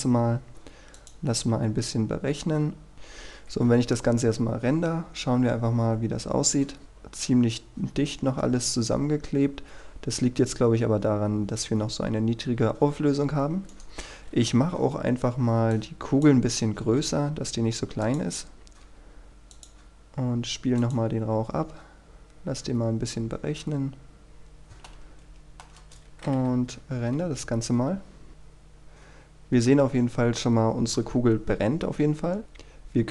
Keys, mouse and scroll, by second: 0.0 click, 3.6 F12, 6.8 middle click, 10.3-12.2 scroll up 1, 12.2 Escape, 13.3-13.8 scroll down 1, 13.8 right click, 14.2-15.8 scroll up 1, 15.8 click, 16.9 s, 18.2 click, 18.5-19.0 scroll down 1, 19.0 g, 19.6 click, 24.5-25.0 scroll up 1, 25.0 middle click, 25.9 KP_0, 26.8-27.3 scroll down 1, 27.3 F12, 28.3-29.6 scroll down 1, 32.4-33.1 scroll up 1.